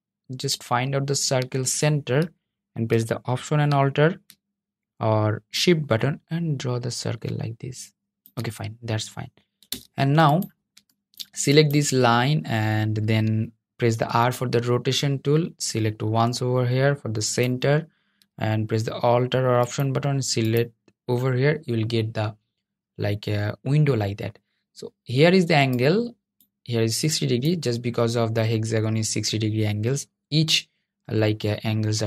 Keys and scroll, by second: 13.3 r.